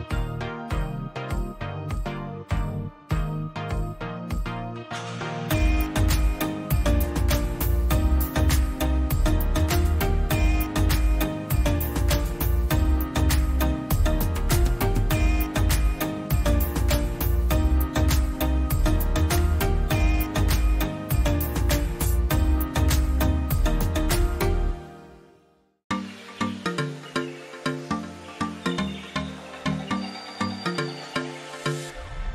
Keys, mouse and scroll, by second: 0.5 click, 1.1 click, 2.5-4.1 typing, 2.6 click, 4.4 ctrl+a, 13.2 click, 17.2 click, 19.0 click, 19.2 click, 20.3 click, 20.5 ctrl+a, 21.8-22.8 drag, 24.2-25.2 drag, 26.5-27.5 drag, 27.6-28.6 drag.